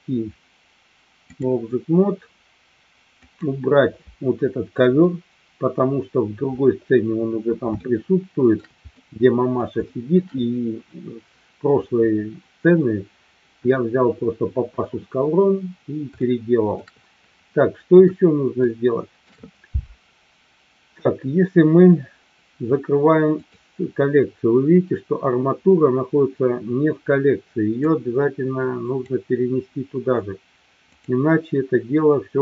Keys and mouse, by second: 3.2 click, 4.8 Delete, 7.8-8.6 shift+middle drag, 8.9-9.6 middle drag, 9.8 shift+middle drag, 16.2-16.8 shift+middle drag, 18.6-19.2 shift+middle drag, 23.3 click, 27.8-29.1 drag.